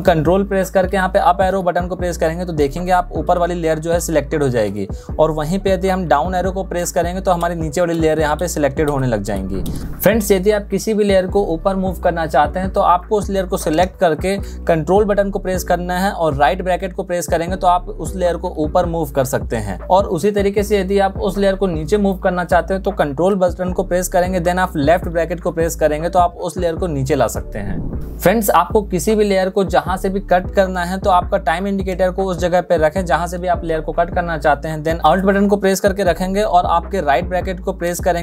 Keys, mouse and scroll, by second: 5.7 ctrl+v, 14.7 ctrl+}, 23.1 ctrl+{, 34.9 alt+}.